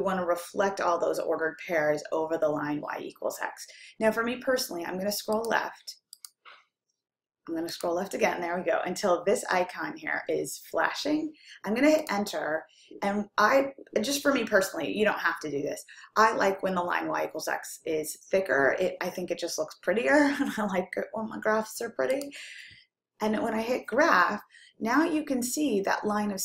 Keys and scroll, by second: 5.6 Left, 6.5 Left, 8.4 Left, 12.3 Return.